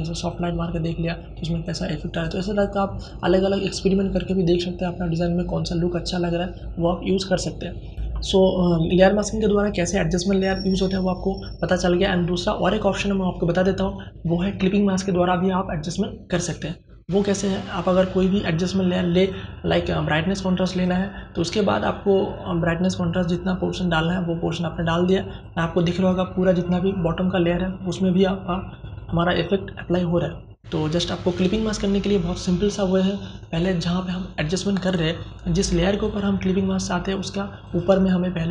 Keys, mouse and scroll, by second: 7.9 Delete, 18.1 click, 22.2-34.9 drag.